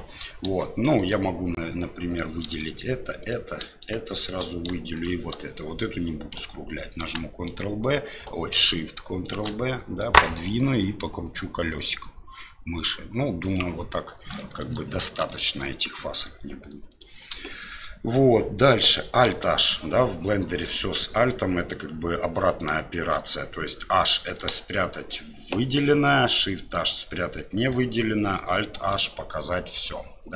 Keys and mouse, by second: 1.0 shift+right click, 3.2 shift+right click, 4.0 shift+middle click, 4.9 shift+right click, 7.0 ctrl+b, 9.3 ctrl+shift+b, 14.3 shift+middle click, 15.2 shift+middle click, 17.5 shift+middle click, 28.8 alt+h.